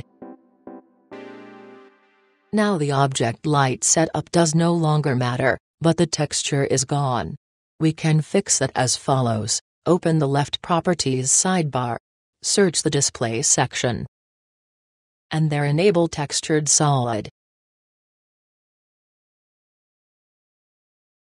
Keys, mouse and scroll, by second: 1.2-8.8 drag, 10.8-15.6 drag, 17.1-18.6 drag, 20.7-21.3 drag.